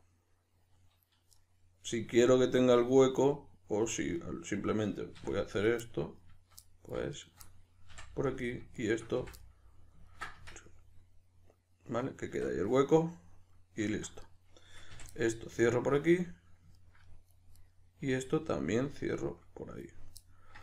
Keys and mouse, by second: 5.2 2, 5.5 right click, 5.8-7.2 middle drag, 7.2 shift+right click, 7.4-8.4 middle drag, 7.9 f, 8.4 right click, 8.7 shift+right click, 9.1 f, 9.4-14.2 middle drag, 10.3 Tab, 12.3 Tab, 14.2 right click, 14.9 f, 15.1-17.6 middle drag, 17.6 right click, 18.0 f, 18.3-20.6 middle drag.